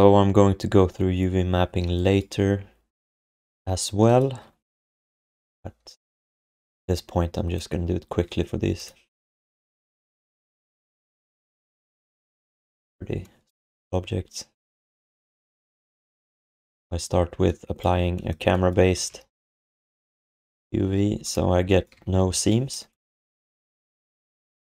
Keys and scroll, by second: 5.2 u, 19.0 alt+shift+d, 19.3 ctrl+s, 20.8 ctrl+s, 22.3 alt+q.